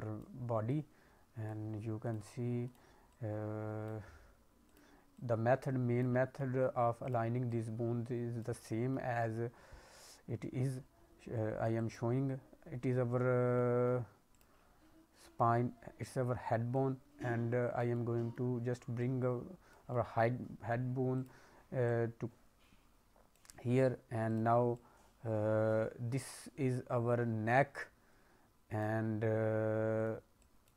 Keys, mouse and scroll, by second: 0.6 click, 2.0 click, 2.6 click, 3.0 click, 4.6 click, 5.1 click, 6.1 scroll up 2, 6.4 middle click, 7.0 click, 7.4 click, 8.5 middle click, 11.7 click, 13.5 middle click, 14.2 click, 16.7 click, 17.9 middle click, 18.9 click, 19.8 middle click, 21.1 click, 21.8 click, 24.2 click, 24.7 click, 29.9 click, 30.3 click.